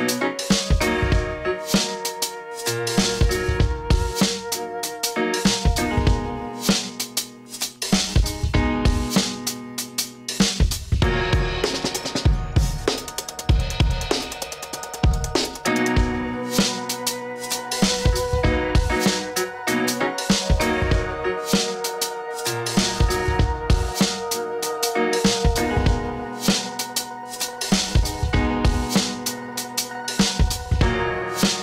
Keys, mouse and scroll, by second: 4.1 v, 4.6 click, 8.0 click, 10.9-12.8 drag, 15.9 g, 16.4-19.1 drag, 22.9 v, 23.1 click, 25.8 click, 27.4-29.0 drag.